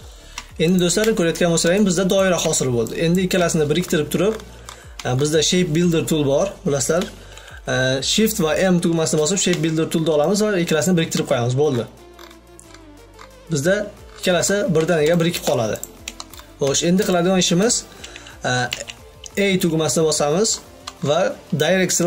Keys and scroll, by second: 7.9 shift+m, 19.0 a.